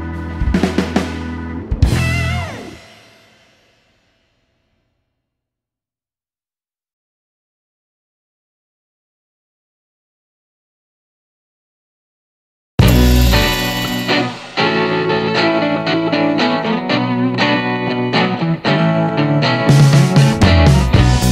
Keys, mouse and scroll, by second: 2.6-5.1 drag, 6.6 click, 7.8 shift+d, 9.1 8, 10.0 Return, 12.3-15.2 drag, 16.1-16.5 scroll up 1, 17.5-17.9 scroll down 2, 18.0 middle click, 18.3-19.0 scroll up 2, 20.5-21.0 scroll up 2, 21.2-21.3 middle drag.